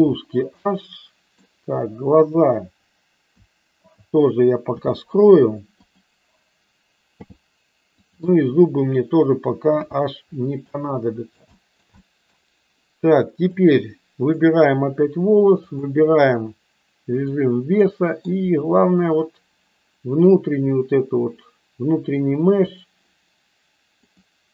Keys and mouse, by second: 0.6-1.3 middle drag, 2.2 click, 3.9 click, 4.6 h, 7.0 h, 7.9 click, 9.8 h, 10.6-11.3 middle drag, 11.5 shift+middle click, 12.0 middle click, 13.4 click, 14.2 drag, 15.8-17.3 drag, 17.6 middle click, 19.0-22.6 drag.